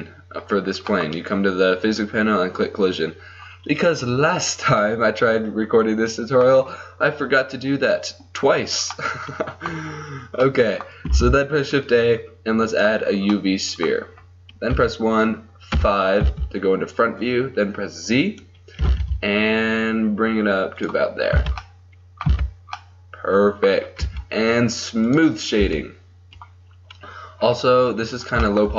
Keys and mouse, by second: 1.0-2.8 middle drag, 3.5-5.4 middle drag, 5.6-10.6 middle drag, 11.2 shift+a, 14.8 KP_1, 15.7 KP_5, 16.2 z, 18.9 g, 21.8 click, 22.3 z, 24.1 t, 25.2 click, 25.7 t, 27.5-28.7 middle drag.